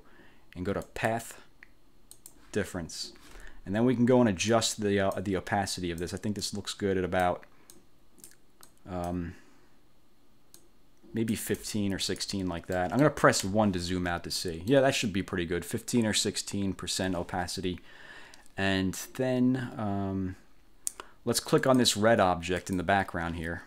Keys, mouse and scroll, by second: 1.0 click, 2.3 click, 4.6 click, 5.6 click, 6.5-7.5 drag, 7.9 click, 8.8 click, 10.7 click, 12.1 click, 12.9 middle click, 13.5 1, 14.5 click, 21.7 click, 22.7 click.